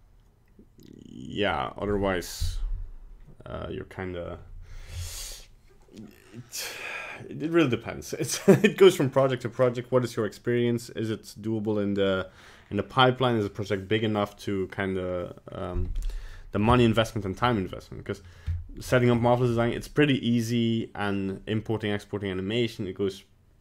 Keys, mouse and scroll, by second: 16.3 middle click, 17.5 middle click, 18.2 middle click, 18.5 middle click, 18.8 middle click, 18.8 scroll down 4, 19.2 middle click.